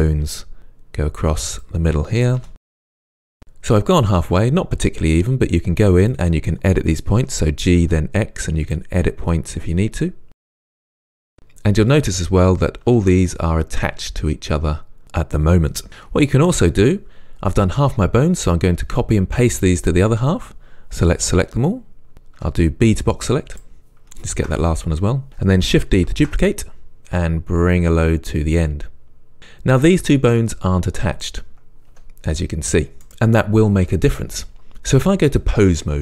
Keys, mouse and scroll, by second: 1.6 click, 2.4 e, 2.8 click, 3.0 e, 3.2 click, 6.1 click, 7.2 g, 8.8 click, 10.5 g, 10.7 click, 10.9 g, 11.0 click, 11.9 click, 12.9 g, 15.9 right click, 22.4 b, 24.3 shift+click, 26.2 shift+d, 29.4 click, 32.0 g.